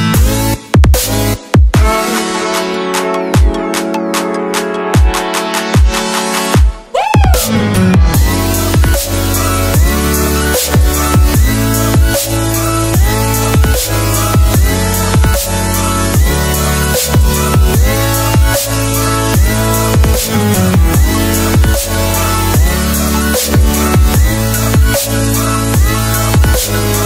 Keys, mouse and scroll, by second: 0.3 click, 1.2 Delete, 1.5 click, 6.1 alt+scroll up 2, 7.1 click, 9.7 Return, 10.2 alt+scroll down 1, 10.7 click, 16.8 click, 17.3 Right, 18.2 click, 23.0 Up, 23.3 Right, 24.2 click, 25.8 Left, 26.6 0.